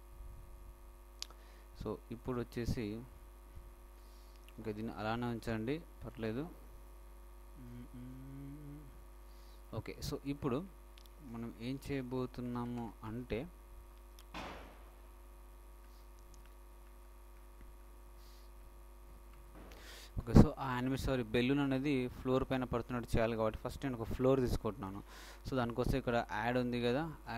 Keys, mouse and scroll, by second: 2.5-8.9 shift+middle drag, 22.8-25.3 middle drag.